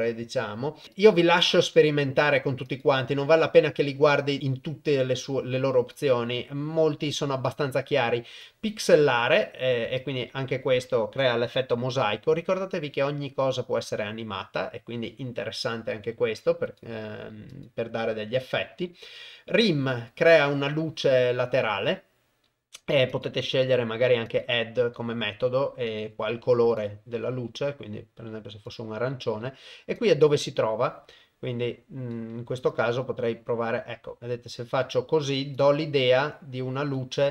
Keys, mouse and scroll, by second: 0.9 click, 2.6 click, 4.4-6.2 drag, 8.4-9.4 shift+drag, 10.0-11.2 shift+drag, 16.6 click, 17.5-19.7 drag, 23.2-24.4 drag, 25.8 click, 30.0-32.1 shift+drag, 32.7-35.0 shift+drag, 35.6-36.9 shift+drag.